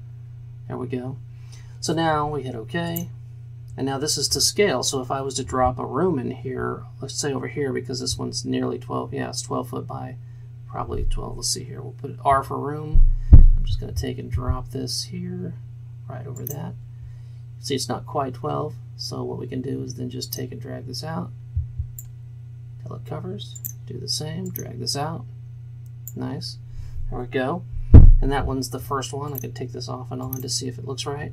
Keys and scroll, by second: 12.4 r.